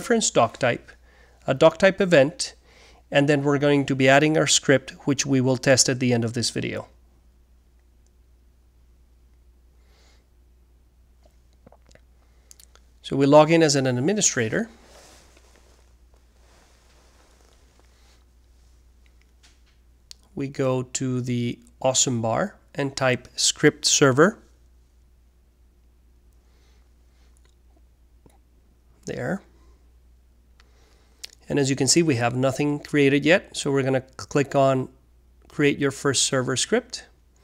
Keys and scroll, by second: 25.6-28.9 typing, 36.5-37.4 typing.